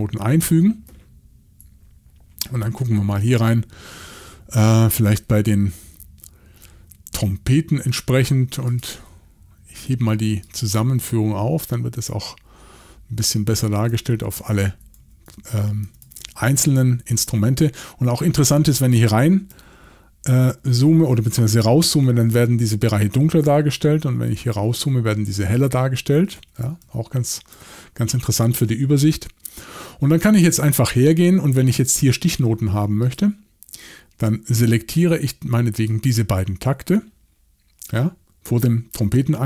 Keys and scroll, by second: 13.6-19.5 typing, 23.2-24.8 typing, 25.9-28.2 typing.